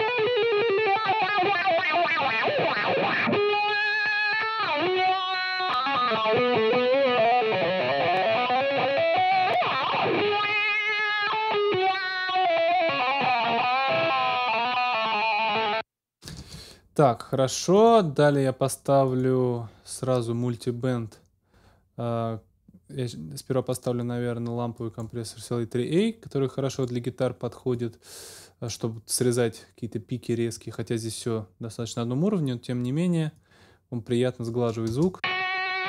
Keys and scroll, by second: 15.5 space, 16.3 super+space, 16.4 super+s, 34.9 space.